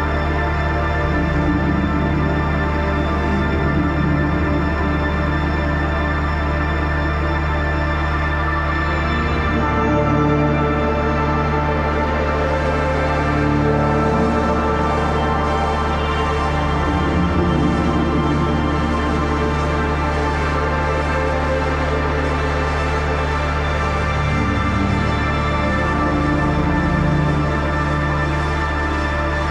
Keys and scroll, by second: 14.1 [, 14.5 ], 16.2 ], 17.4-18.7 typing, 18.8 ctrl+d, 19.6 ctrl+t, 24.6 ctrl+z.